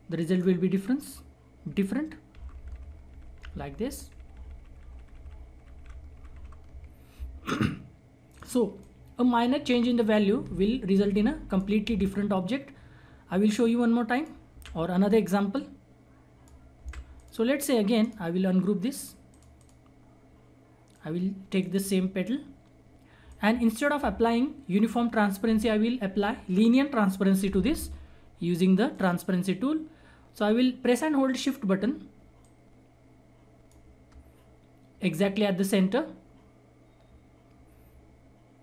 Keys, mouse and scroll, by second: 0.2 ctrl+right click, 2.3 ctrl+r, 6.9 scroll down 1, 8.3-10.4 drag, 10.4 Delete, 10.9 click, 11.8 Delete, 12.1 scroll down 1, 12.6-13.6 scroll up 1, 13.6 click, 14.5 Delete, 15.4 click, 16.7 Delete, 17.1 click, 18.0 right click, 19.3 click, 19.9-20.9 scroll up 1, 20.9 click, 21.6 right click, 22.0-22.5 scroll down 1, 22.5-23.2 scroll up 1, 23.2-26.2 drag, 28.9 click, 29.7-31.0 scroll up 1, 32.4-34.6 shift+drag, 34.6-36.0 scroll up 1, 36.2-36.9 scroll down 1, 36.9-37.6 scroll up 1.